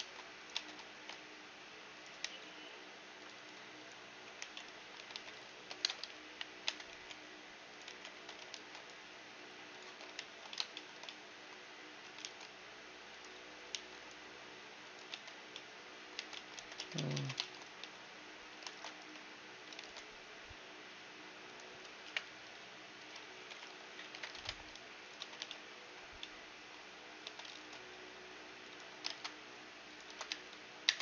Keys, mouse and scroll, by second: 0.0 ctrl+a, 0.6 Tab, 0.6-2.6 middle drag, 0.9 ctrl+b, 2.2 t, 3.2-5.6 drag, 4.4 t, 4.9 right click, 4.9 a, 5.1 a, 5.6 ctrl+n, 5.6-6.9 middle drag, 6.2 KP_1, 6.6 Tab, 6.9 t, 7.7-9.7 drag, 7.9 t, 8.2 Tab, 8.7 ctrl+r, 10.1 ctrl+3, 10.5-13.1 middle drag, 12.2 ctrl+r, 13.1-13.7 scroll up 1, 13.7 ctrl+r, 15.1 Tab, 15.4 scroll down 1, 15.5-16.7 middle drag, 16.1 Tab, 16.6 ctrl+z, 16.7 ctrl+z, 17.1 ctrl+z, 17.8 a, 18.7-21.0 right drag, 18.9 ctrl+x, 20.3 ctrl+r, 22.0 KP_7, 22.3 z, 22.5-24.6 middle drag, 23.5 ctrl+l, 24.1 KP_Divide, 24.6 ctrl+Tab, 25.2 a, 25.4 z, 25.5-29.0 middle drag, 27.2 a, 27.5 ctrl+r, 30.0 ctrl+Tab, 30.3 ctrl+x.